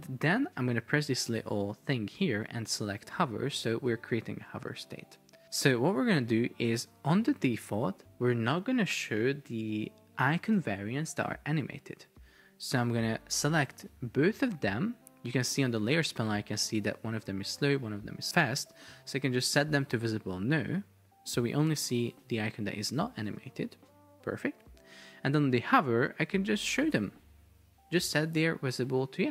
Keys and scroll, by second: 23.4 super+p, 24.6 Escape, 27.7 super+é.